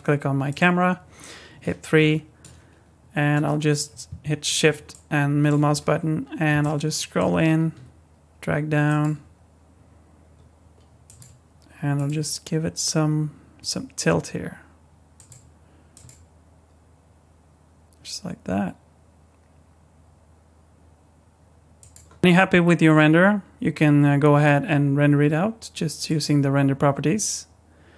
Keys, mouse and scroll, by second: 0.5 click, 1.5 KP_3, 2.5 scroll down 1, 4.9 shift+middle click, 5.7-6.4 shift+scroll up 3, 6.6 shift+middle click, 7.7 r, 9.1 g, 11.2 r, 12.1 g, 15.3 r, 16.0 g, 26.1 click.